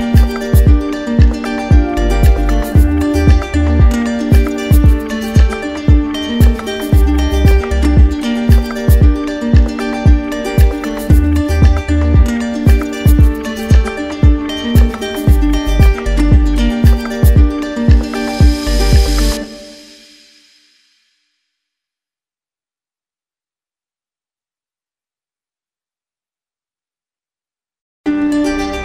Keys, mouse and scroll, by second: 0.2 right click, 3.2 click, 4.2 right click, 4.9 right click, 5.9 click, 11.1 click, 12.1 right click, 13.0 click, 13.2 click, 15.0 right click, 15.8 right click, 16.4 alt+right click, 16.5 alt+right click, 16.8 right click, 18.8 right click, 19.5 right click, 20.1 right click, 20.7 alt+right click, 20.9 alt+right click, 22.1 right click, 23.0-24.0 drag, 25.6-26.6 drag, 28.7 click.